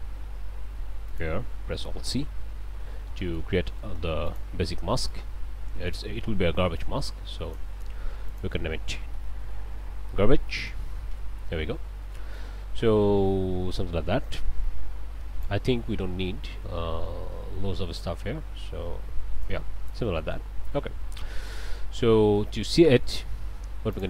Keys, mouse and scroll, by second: 1.1 ctrl+click, 2.5 alt+c, 3.2 click, 4.3 click, 5.1-6.2 drag, 6.8 click, 8.3 click, 9.1-10.6 typing, 11.1 Return, 12.1 click, 15.4-19.6 drag, 19.9 click, 20.7 ctrl+space, 21.3 ctrl+middle click, 22.4 click, 23.0 click, 23.9 ctrl+shift+click.